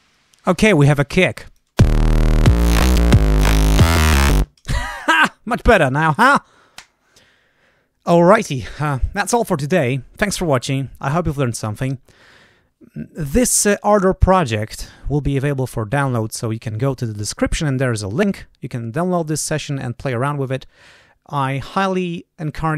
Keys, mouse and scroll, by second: 0.1 scroll up 1, 1.7 space, 4.3 space.